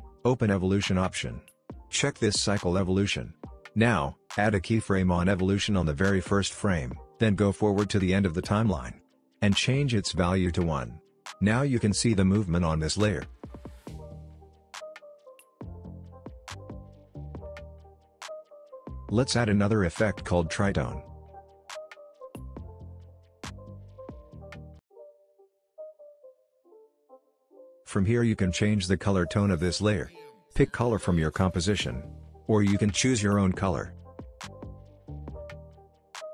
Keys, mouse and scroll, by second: 0.3-1.0 scroll down 1, 1.0 click, 1.4-2.5 scroll down 1, 2.5 click, 4.9-7.2 drag, 9.4 Return, 10.3 click, 10.6 space, 12.9-13.6 click, 13.6-14.0 scroll down 1, 14.0-14.8 scroll up 1, 14.8 click, 18.4 click, 22.5-23.7 typing, 24.9 typing, 26.0-34.4 drag.